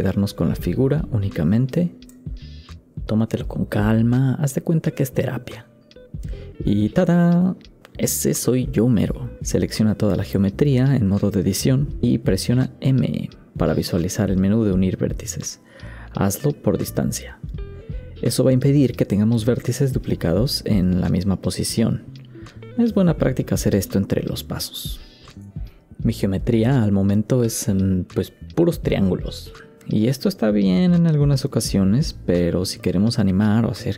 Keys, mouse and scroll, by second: 1.6 x, 2.0 middle click, 2.2 ctrl+right click, 2.4 middle click, 2.4 x, 11.3 Tab, 12.1 a.